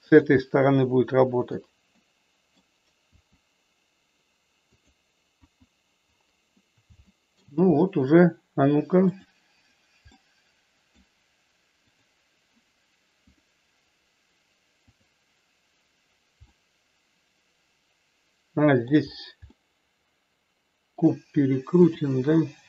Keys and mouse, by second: 0.1 click, 0.3-1.5 middle drag, 2.0 middle click, 3.2 r, 4.7 click, 5.3 KP_1, 7.1 shift+middle click, 9.1 click, 10.2 middle click, 14.8 click, 16.5-18.8 middle drag, 19.5-21.0 middle drag, 21.8 r.